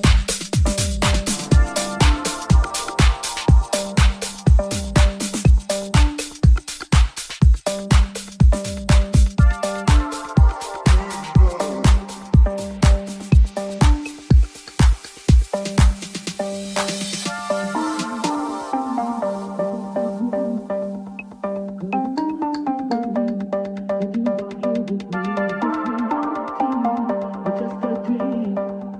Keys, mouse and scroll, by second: 2.9 click, 3.7 ctrl+middle click, 4.5 shift+middle click, 4.9-9.2 drag, 7.9 Tab, 9.2-14.0 right drag, 13.2 Tab, 14.2 shift+right click, 14.2-20.9 drag, 16.1 alt+middle click, 16.1 alt+right click, 17.0-20.3 ctrl+z, 20.7 3, 20.9-25.9 alt+drag, 21.7 alt+e, 25.9 middle click, 26.3-28.6 middle drag, 28.7 middle click.